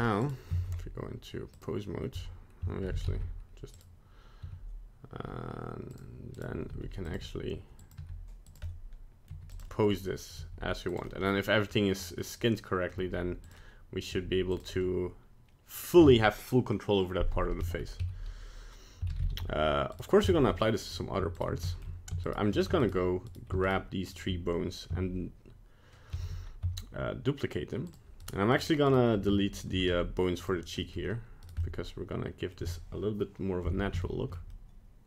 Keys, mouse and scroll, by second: 0.6 ctrl+Tab, 2.1 a, 2.8 alt+r, 2.9 alt+g, 3.0 alt+s, 3.7 right click, 4.4 r, 6.3 right click, 6.6 g, 7.1 r, 7.9 g, 8.6 middle click, 9.3 g, 9.7 middle click, 10.3 right click, 10.3 g, 11.0 middle click, 11.7 middle click, 12.2 middle click, 12.9 g, 13.5 middle click, 14.0 middle click, 14.1 g, 14.8 middle click, 17.6 middle click, 17.8 middle click, 18.0 a, 19.1 alt+r, 19.2 alt+g, 19.9 right click, 20.3 Tab, 20.6 middle click, 21.3 shift+right click, 21.6 shift+middle click, 22.2 shift+right click, 22.8 shift+right click, 23.2 right click, 23.6 shift+right click, 24.1 shift+right click, 26.1 shift+d, 28.2 right click, 28.5 right click, 28.8 right click, 29.5 shift+right click, 29.7 x, 30.8 middle click, 31.4 right click, 31.6 middle click, 34.0 shift+middle click, 34.5 middle click.